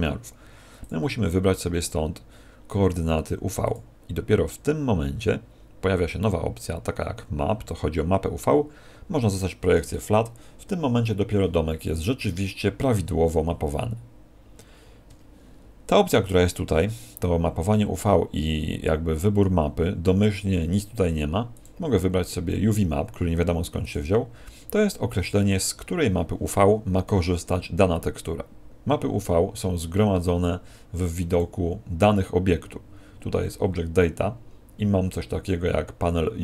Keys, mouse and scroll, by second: 0.7 click, 15.0 Escape, 21.5 click, 31.2 click.